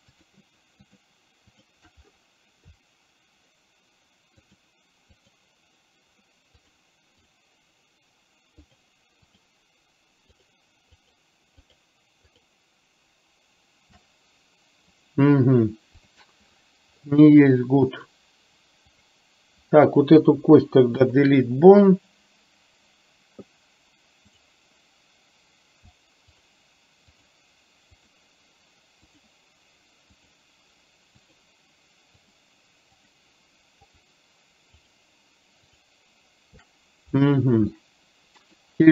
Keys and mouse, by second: 0.2 shift+click, 0.9 shift+click, 1.6 shift+click, 4.4 shift+click, 5.2 shift+click, 8.7 shift+click, 9.4 shift+click, 11.6 shift+click, 16.1 click, 20.4 Delete, 24.4 click, 27.3 shift+click, 30.2 shift+click, 31.3 shift+click, 32.3 shift+click, 32.9 shift+click, 34.9 shift+click, 35.8 shift+click, 37.8 middle click.